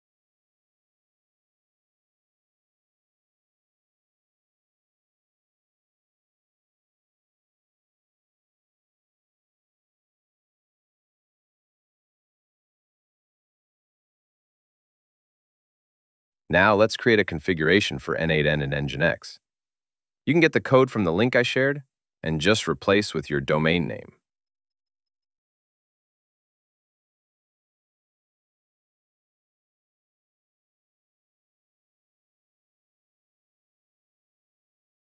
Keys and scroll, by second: 7.7 alt+super+Right, 15.6 super+v, 21.8 super+v, 23.0 Up, 25.1 Right, 29.2 BackSpace.